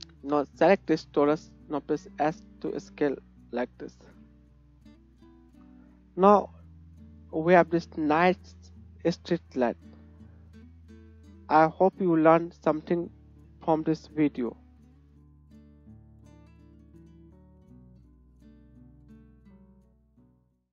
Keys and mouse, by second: 1.0 right click, 1.4 s, 3.5 g, 4.1 middle click, 5.2 shift+click, 5.4-5.7 shift+middle drag, 5.7 shift+click, 7.3-20.7 middle drag.